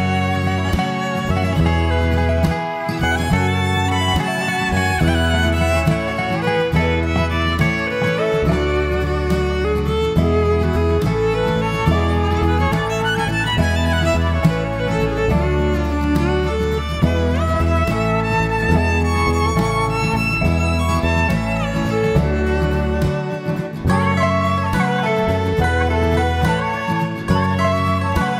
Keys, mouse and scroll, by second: 2.9-3.3 scroll down 4, 3.3 middle click, 7.3 click, 8.6 click, 9.3 click, 9.9 click, 10.3 click, 10.8 click, 11.7-12.0 scroll down 3, 12.0 middle click, 12.6-13.2 scroll down 2, 13.3 middle click, 14.0 shift+middle click, 14.6-15.7 scroll up 4, 15.7-16.1 scroll down 1, 16.1 click, 16.7-17.2 scroll down 2, 17.2 middle click, 24.5 Tab, 25.3 Tab, 27.1 click, 27.8-28.2 scroll down 3.